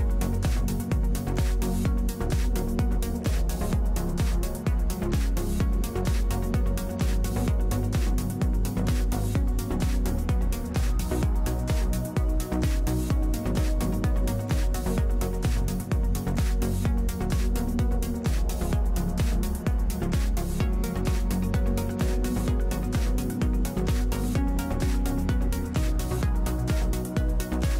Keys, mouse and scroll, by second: 0.8 n, 3.2 v, 5.4 v, 5.5 Tab, 5.8 middle click, 7.7 middle click, 7.9-10.0 drag, 10.7 click, 11.0 Tab, 11.4 a, 11.5 a, 12.0 ctrl+Tab, 13.9 l, 14.8 l, 16.0 l, 17.3 l, 17.8 l, 18.3 l, 19.8 ctrl+i, 20.7 a, 22.1 Tab, 23.9-26.0 middle drag, 26.1-27.7 drag.